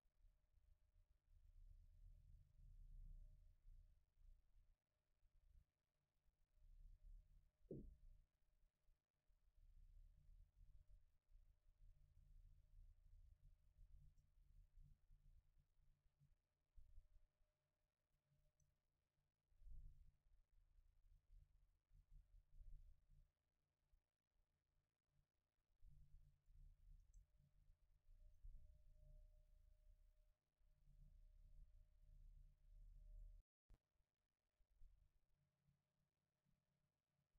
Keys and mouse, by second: 3.3 middle click, 18.5-20.5 right drag, 20.5-23.6 drag, 27.1-29.7 right drag, 28.3-31.8 drag.